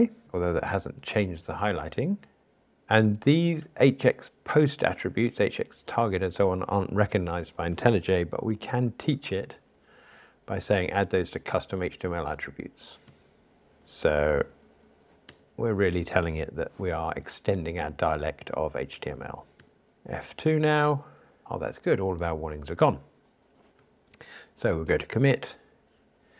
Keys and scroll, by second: 8.5 alt+Return, 14.1 alt+Return, 19.6 alt+Return, 20.2 F2, 24.9 super+k.